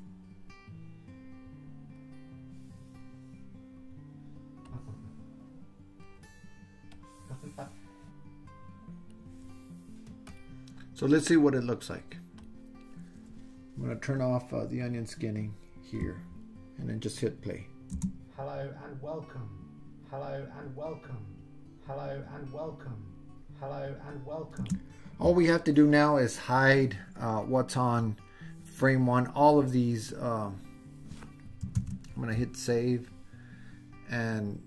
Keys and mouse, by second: 4.8-6.3 drag, 7.1-9.3 drag, 10.4-12.5 drag, 14.8 click, 18.0 space, 24.6 space, 27.6-28.4 drag, 31.9 super+s.